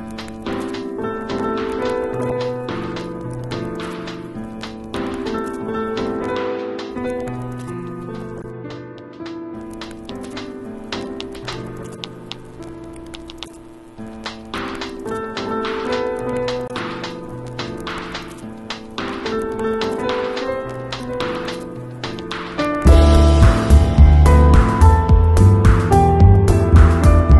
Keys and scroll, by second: 0.6 [, 1.3 [, 1.8 ], 2.9 space, 3.5 ], 5.4 space, 6.0 [, 7.1 [, 8.6 [, 9.5 [, 10.5 alt+super+z, 12.6 space, 14.3 ], 15.0 [, 16.5 ], 17.2 ], 19.7-23.8 typing, 25.3 [, 26.4 ].